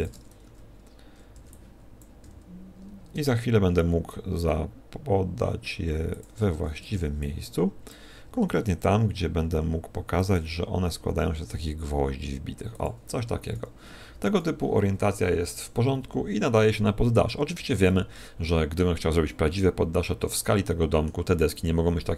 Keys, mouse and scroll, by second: 0.4 ctrl+click, 0.4 a, 2.0 b, 2.2 g, 6.5 shift+click, 6.5 a, 7.9 b, 8.2 s, 10.4 click, 10.4 g, 13.2 click, 13.2 a, 14.1 a, 17.8 middle click, 19.2 middle click.